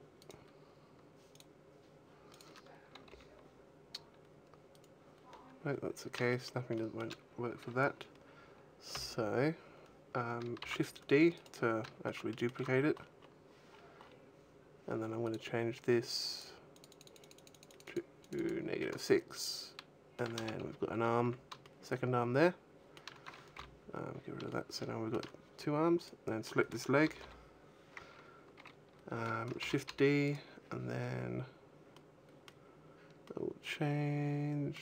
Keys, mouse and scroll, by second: 0.1 right click, 1.2 click, 2.9 g, 4.7 right click, 6.0 shift+middle click, 6.5 shift+middle click, 7.1-8.1 scroll down 2, 9.0 n, 9.3-10.3 scroll down 1, 10.4 shift+d, 11.3 right click, 11.9 shift+middle click, 12.6 scroll up 1, 15.1 click, 19.2 shift+middle click, 20.2 a, 20.9 scroll down 1, 21.1 a, 21.4 shift+middle click, 23.4 n, 23.6-24.4 scroll up 4, 24.3 shift+middle click, 25.8 right click, 26.9 l, 27.1 l, 29.5 shift+d, 30.6 right click, 31.8 middle click, 33.1 middle click.